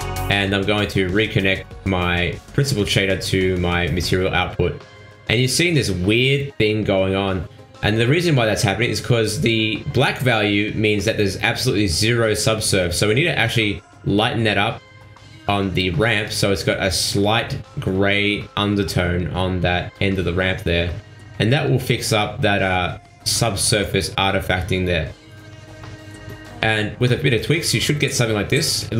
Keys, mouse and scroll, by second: 0.4 ctrl+shift+click, 3.8 middle click, 4.9 scroll down 2, 7.9 shift+middle click, 8.8 scroll up 3, 9.6 click, 10.4 click, 15.2 scroll down 4, 16.8 ctrl+s, 18.5 middle click, 21.8 click, 22.4 click, 24.9 middle click.